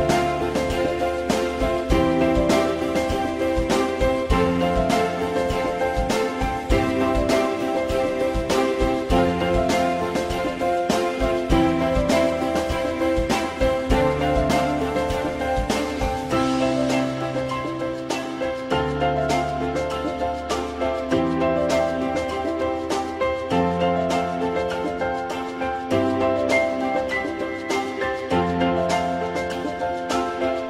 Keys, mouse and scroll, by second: 3.3 Return, 3.3 8, 3.4-4.6 middle drag, 5.3 middle click, 14.7-15.5 typing.